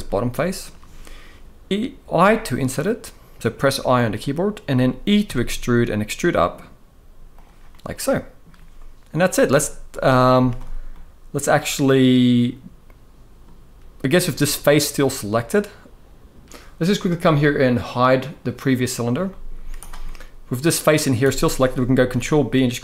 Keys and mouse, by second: 1.8 i, 4.9 e, 7.4 middle click, 9.0 middle click, 9.6 middle click, 10.0 z, 10.6-13.1 middle drag, 14.3-15.3 middle drag, 18.5 click, 19.0 middle click, 19.3 z, 19.7 middle click, 21.8 ctrl+b.